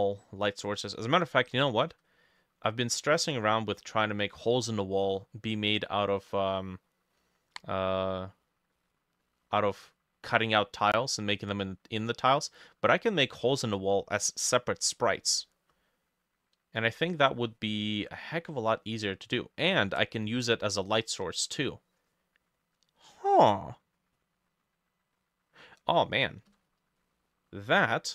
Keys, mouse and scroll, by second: 0.0 middle click, 0.4-1.0 scroll up 3, 1.0 middle click, 1.2-2.1 scroll up 3, 2.1 middle click, 3.2 middle click, 6.6 middle click, 7.8 middle click, 8.2 middle click, 8.8 middle click, 9.3 middle click, 9.8-10.8 scroll down 1, 12.0 middle click, 12.6 middle click, 12.7-13.0 scroll down 1, 13.0 scroll up 1, 13.4 scroll down 1, 13.6 middle click, 17.3 middle click, 18.8-21.1 drag, 18.8 middle click, 26.6-28.1 drag, 26.6 middle click, 26.7 scroll down 1, 27.0 middle click, 27.7 middle click.